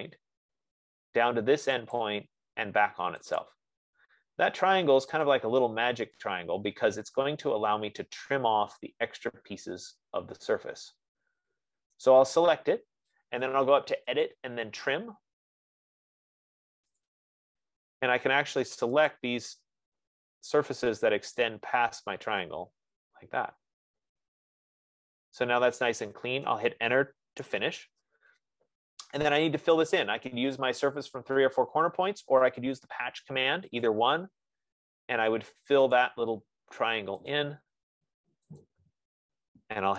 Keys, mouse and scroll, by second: 0.0 click, 1.4 F15, 2.7 click, 3.8 click, 5.6 click, 9.2-10.9 drag, 12.4-14.0 right drag, 14.6 click, 17.5 click, 19.5 click, 21.7 click, 26.8 right click, 27.7 Return, 34.3 click, 36.5 click, 37.8 click.